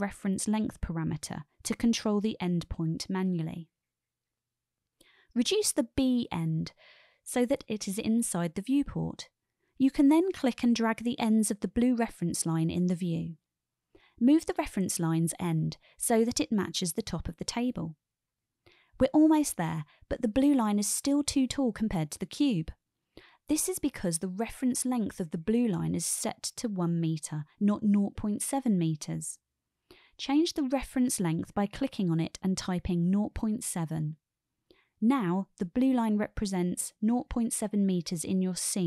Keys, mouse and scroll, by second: 3.3-6.7 drag, 8.2-8.7 shift+middle drag, 8.7 shift+click, 9.2 middle click, 9.6-9.9 shift+middle drag, 12.2-13.9 drag, 14.6 shift+middle click, 14.8-15.2 shift+drag, 15.2-16.2 shift+middle drag, 18.3-21.6 drag, 30.6-34.6 drag, 36.8-38.8 drag.